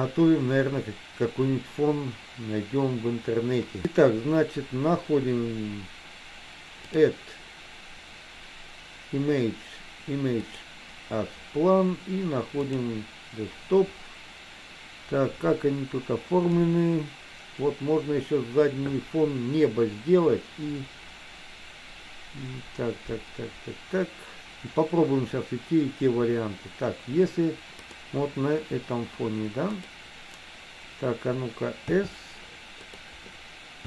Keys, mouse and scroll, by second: 7.0-11.0 drag, 32.0 s.